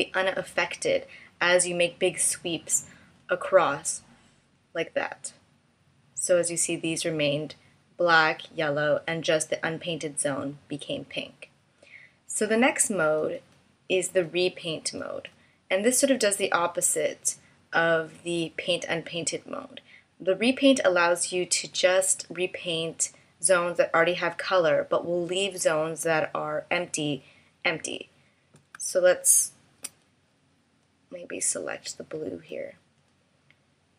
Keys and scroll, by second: 28.8 space.